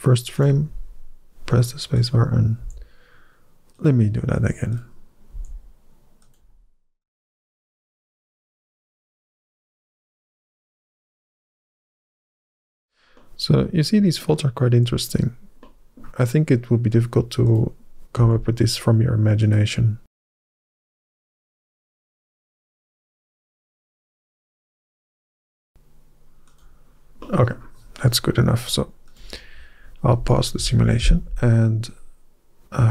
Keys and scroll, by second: 2.4 g, 5.2 g, 7.2 g, 7.8 g, 8.5 g, 9.1 g, 10.7 g, 11.6 g, 13.8-16.2 typing, 17.7 g, 18.9 g, 19.6 g, 20.2 g, 21.0 g, 22.6 g, 23.0 g, 23.7 g, 24.3 g, 25.5 g.